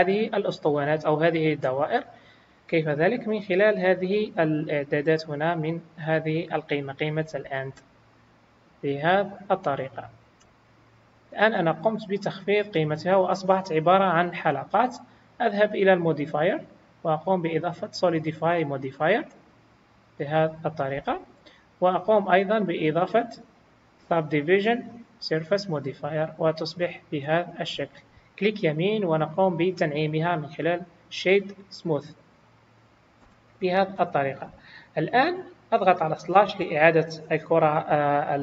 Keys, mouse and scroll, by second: 2.0-3.7 scroll down 2, 6.6 click, 10.6-11.4 scroll down 3, 11.4 scroll down 3, 11.8 middle click, 13.0-13.9 scroll up 1, 13.9 scroll down 1, 16.0 click, 16.0 scroll down 1, 17.1 click, 19.5-20.1 scroll up 3, 20.3 scroll up 2, 22.6 click, 26.0 scroll down 1, 26.9 middle click, 28.4 right click, 32.4-33.2 scroll down 3, 33.2 KP_1, 34.8 click, 35.4-35.7 scroll down 1, 36.4 scroll down 3.